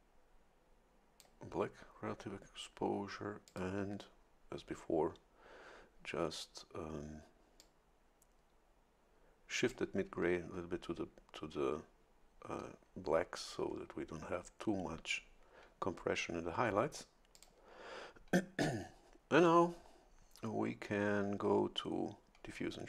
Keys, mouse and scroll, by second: 3.4 click, 7.6-9.9 drag, 17.3 click.